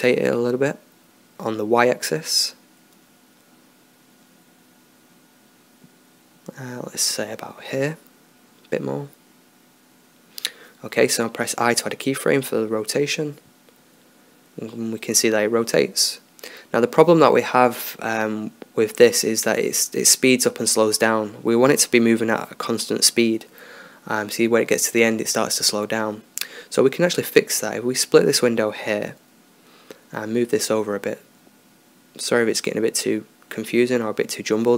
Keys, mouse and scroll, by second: 0.9 r, 11.1 i, 14.1-15.6 drag, 15.7 drag, 28.1-29.3 drag, 29.7 click, 32.0-34.7 drag.